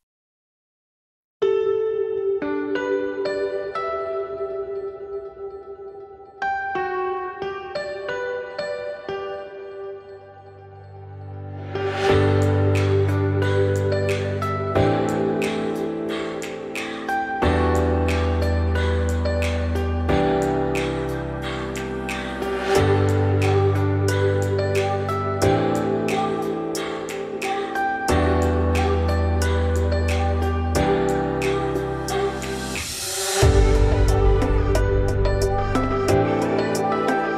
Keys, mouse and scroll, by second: 0.4 Tab, 0.8 middle click, 1.1 Tab, 1.3 click, 1.5 3, 1.7 click, 2.0 middle click, 2.6 shift+click, 3.0 shift+middle click, 3.6-4.1 scroll down 2, 4.1 1, 6.4 2, 6.8 click, 7.4 shift+click, 7.7 g, 9.7 click, 10.0 g, 12.5 click, 12.9 g, 16.8 click, 17.3 shift+click, 17.6 middle click, 17.9 g, 18.5 `, 19.2 scroll up 1, 19.5 shift+middle click, 19.9-20.4 scroll up 2, 20.4 shift+middle click, 21.3 click, 21.9 shift+click, 22.2 shift+click, 23.0 shift+click, 23.6 shift+click, 24.4 g, 27.0 1, 27.3 click, 27.8 scroll down 2, 28.0 g, 29.9 3, 30.1 click, 30.7-31.1 scroll up 2, 31.1-33.5 shift+middle drag, 33.5 r, 34.8 e.